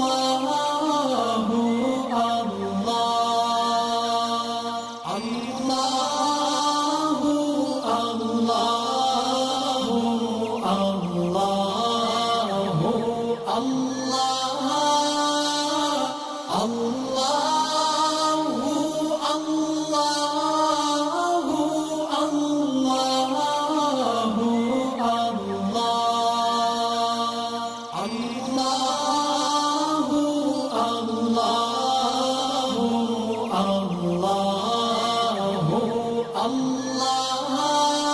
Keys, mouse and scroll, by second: 0.7 alt+scroll down 1, 1.2 space, 1.3 click, 1.9 alt+scroll up 1, 2.3 click, 6.3 click, 6.3 click, 10.8-11.3 scroll down 1, 13.2 click, 13.7 scroll down 1, 14.6 click, 15.0 scroll up 1, 16.2 scroll up 1, 17.1 click, 17.6-18.5 scroll down 1, 18.5 click, 19.1 scroll down 1, 20.2 click, 20.7-21.0 scroll up 1, 21.0 scroll down 1, 21.5 scroll up 1, 21.6-22.8 scroll down 1, 22.9-23.2 scroll down 1, 23.2 click, 24.3 alt+scroll down 1, 26.1 click, 26.5 space, 26.7 click, 27.1 space, 27.5 click, 27.6-28.7 alt+drag.